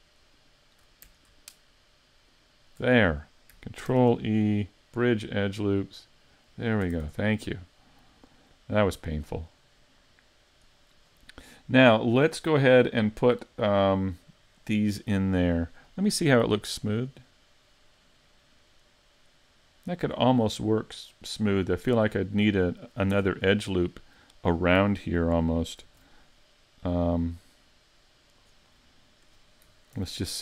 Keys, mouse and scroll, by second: 0.4 shift+right click, 1.3 alt+right click, 1.4 alt+shift+right click, 2.3 alt+shift+right click, 3.9 ctrl+e, 6.9 a, 7.0 Tab, 7.3-7.8 scroll down 5, 7.8 middle click, 10.7 scroll down 2, 11.1 scroll up 4, 11.5 middle click, 12.1 shift+middle click, 14.9-15.3 scroll down 2, 16.8 click, 17.3-17.7 scroll down 3, 17.7 middle click, 20.4 scroll down 1, 20.6 scroll up 3, 21.2 middle click, 22.2-22.7 scroll up 2, 22.7 middle click, 23.2 Tab, 23.5 middle click, 25.8 ctrl+r, 28.5 right click, 28.8 middle click, 30.0 ctrl+r.